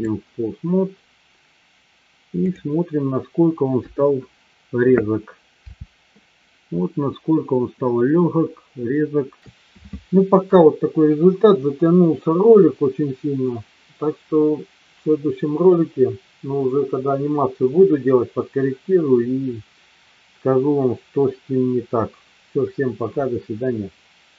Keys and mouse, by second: 2.4 click, 4.1 KP_3, 5.7 g.